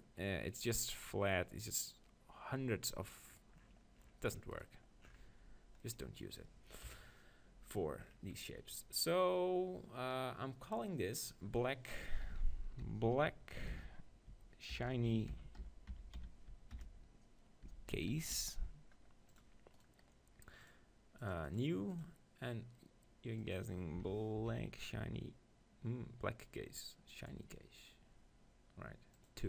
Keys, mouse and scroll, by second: 3.4-4.6 middle drag, 4.7-6.2 right drag, 5.3 Tab, 6.9 KP_1, 8.6-10.1 drag, 19.8-21.6 right drag, 21.6-27.3 drag, 29.3-29.4 drag.